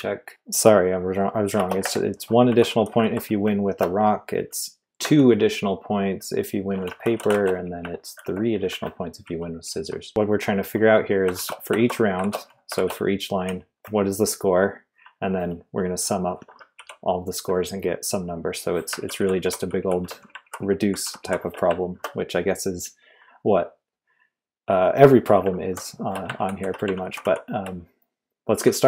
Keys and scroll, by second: 1.5-3.6 typing, 5.0 2, 6.8 Escape, 7.0-13.6 typing, 8.6 Escape, 16.7 typing, 19.0 ctrl+d, 19.1 ctrl+d, 19.4 ctrl+d, 20.4 ctrl+u, 20.6 ctrl+u, 20.8 ctrl+u, 25.6 ctrl+u, 26.3 ctrl+d, 26.6 ctrl+d, 26.9 ctrl+u, 27.1 ctrl+u, 27.2 ctrl+u.